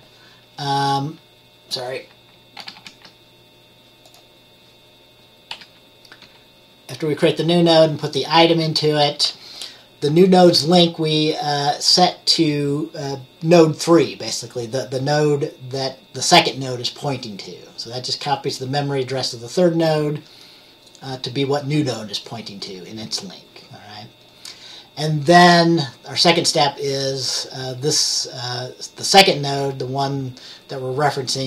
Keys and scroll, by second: 2.7 ctrl+z, 2.9 ctrl+z, 5.6 F10, 6.3 F10, 8.6 F10.